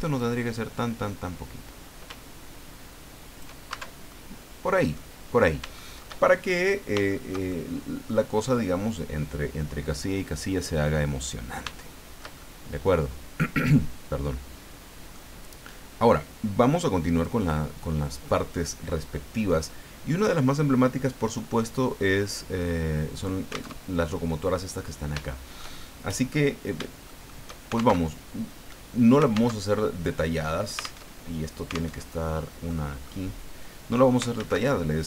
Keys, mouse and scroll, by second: 0.2-3.6 drag, 3.7 shift+Tab, 4.1-5.1 shift+middle drag, 5.4-5.7 scroll down 3, 5.7 shift+middle click, 6.4-6.9 shift+scroll up 3, 7.1-8.2 shift+middle drag, 11.8 shift+middle click, 12.7 middle click, 14.4-14.7 scroll down 2, 15.1-16.2 middle drag, 17.1 click, 23.8 alt+Tab, 25.2 shift+middle click, 26.1 middle click, 27.1 shift+middle click, 27.9 alt+shift+Tab, 29.5 alt+Tab, 31.0 alt+Tab, 32.0 alt+Tab, 32.7 middle click, 34.4 shift+a.